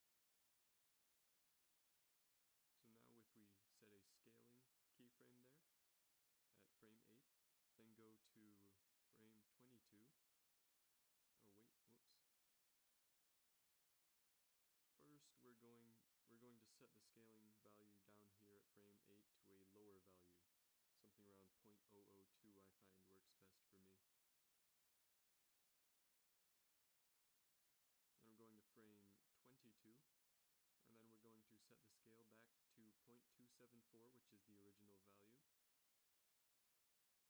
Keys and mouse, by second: 3.1 i, 7.4 Right, 8.1 Right, 8.3-8.8 Right, 9.0 Right, 9.2 Right, 23.3 0, 24.9 ctrl+c, 25.4 ctrl+v, 25.9 ctrl+v, 27.3 i, 29.1-30.1 drag.